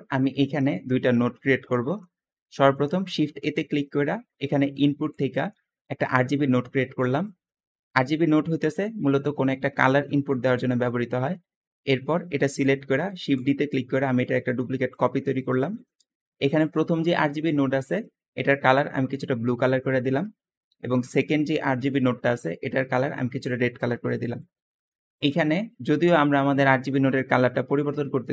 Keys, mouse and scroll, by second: 2.9 shift+a, 3.0 shift+a, 8.3 g, 10.0-11.0 scroll down 2, 10.8 middle click, 13.0 shift+d, 13.0 shift+d, 15.5 click, 20.2-20.7 scroll down 2, 21.3 scroll down 2, 24.7-25.1 scroll down 2.